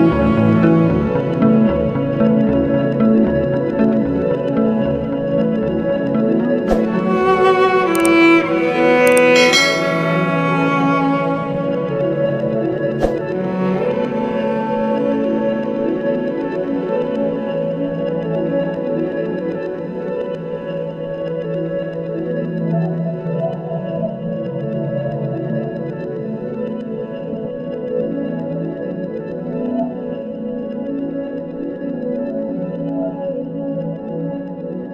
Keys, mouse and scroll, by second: 1.1-1.9 scroll down 1, 2.7 click, 3.2-3.7 scroll down 1, 3.7 scroll up 1, 4.7 click, 6.3 scroll, 6.5-6.9 scroll down 1, 7.2-8.0 scroll up 1, 9.2 click, 10.8 click, 12.0 click, 12.1 double click, 13.4 click, 15.8 click, 16.2-16.7 scroll down 1, 16.7 click, 17.9 click, 18.7-19.3 scroll up 1, 19.3 click, 21.6 click, 23.1 click, 24.6 click, 25.5 click, 27.7 click, 28.1-28.5 scroll down 1, 28.8-29.6 scroll up 1, 29.7 click, 31.9-32.7 scroll up 1, 33.3 click.